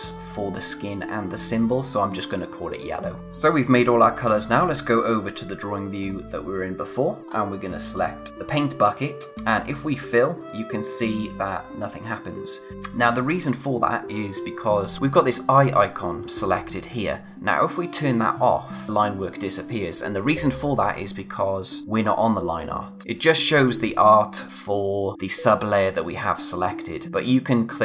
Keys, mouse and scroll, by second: 2.5-2.9 scroll down 1, 8.3 click, 9.9 click, 12.7 click, 18.0 click, 21.8 click.